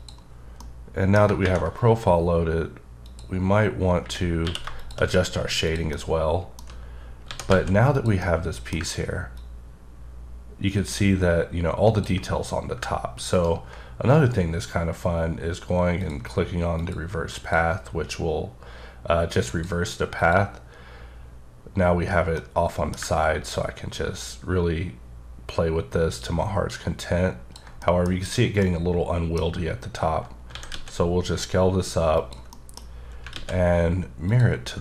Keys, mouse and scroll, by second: 0.5 middle click, 1.1 scroll down 1, 3.0 click, 4.4 q, 4.8 shift+click, 5.2-5.6 scroll down 1, 5.6 click, 5.9 middle click, 7.2 s, 7.5 z, 7.9 click, 8.2 middle click, 9.3 ctrl+click, 13.3 ctrl+right click, 16.0 click, 16.7 click, 17.3 click, 19.5 click, 20.2 click, 22.3 middle click, 23.5 ctrl+click, 27.8 middle click, 30.5 s, 30.7 z, 32.1 click, 32.5 middle click, 33.3 alt+x, 34.3 click.